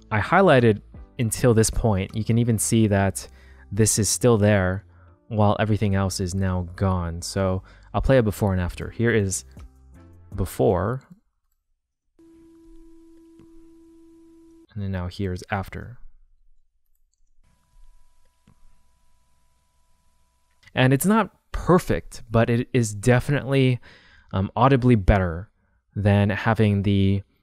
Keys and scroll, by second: 10.0 super+z, 11.9 space, 14.5 space, 17.2 space, 20.6 space.